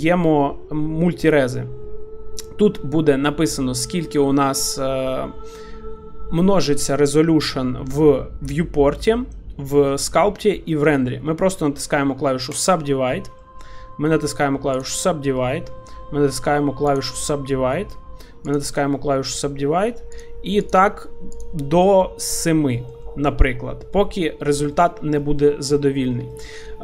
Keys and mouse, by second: 12.5 click, 13.4-14.7 middle drag, 14.7 click, 16.9 click, 18.5 click, 19.3 middle click, 20.2 click, 20.6 click, 21.3 click, 22.2 middle click, 22.7 shift+middle drag, 23.0 middle drag, 24.0 middle click, 24.7 shift+middle click, 25.3 middle click, 26.3-26.8 middle drag.